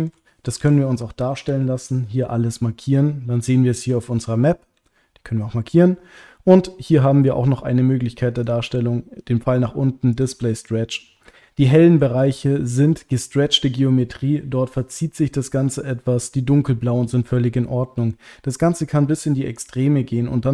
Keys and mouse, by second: 0.6 a, 4.7 a, 8.4-10.5 drag, 10.6 click, 11.8 shift+middle click.